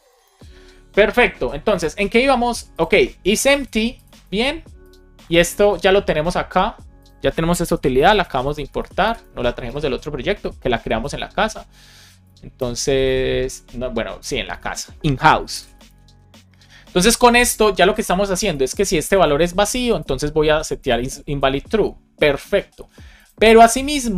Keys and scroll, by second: 0.1 Return, 5.7 super+c, 7.5 Return, 8.4 space, 8.6 super+v, 8.8 space, 10.9 BackSpace, 12.5 shift+super+h, 14.2 Return, 14.5 super+s, 15.4 alt+shift+f, 15.7 super+s.